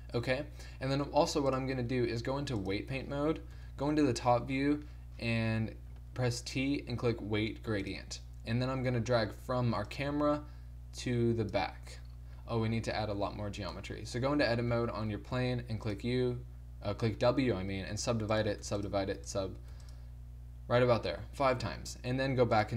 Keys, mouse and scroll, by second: 1.5 click, 3.5 KP_7, 4.4 middle click, 5.0 middle click, 6.1 t, 8.0 click, 12.4-13.8 middle drag, 13.1 z, 13.8 Tab, 14.4 a, 14.7 a, 15.4 w, 18.1 w, 18.7 w, 19.2 w, 19.7 w.